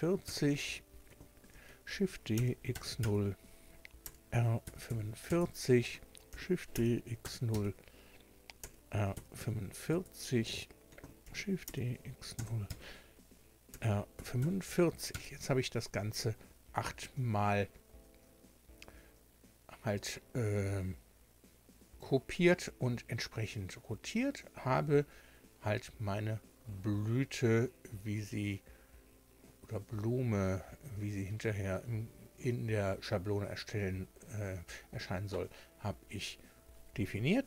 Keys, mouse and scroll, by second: 0.2 KP_Enter, 1.5 shift+d, 2.3 x, 2.7 KP_0, 3.0 KP_Enter, 4.0 r, 4.8 KP_4, 4.9 KP_5, 5.3 KP_Enter, 6.3 shift+d, 6.7 x, 7.2 KP_0, 7.5 KP_Enter, 8.6 r, 9.2 KP_4, 9.4 KP_5, 9.9 KP_Enter, 11.2 d, 11.6 x, 12.4 KP_0, 12.7 KP_Enter, 13.7 r, 14.2 KP_4, 15.1 KP_Enter, 17.0-17.3 scroll down 2, 17.3 scroll up 2, 26.0-26.4 scroll down 2, 26.6-27.0 scroll down 2, 27.6-28.3 scroll up 2, 37.2 Tab.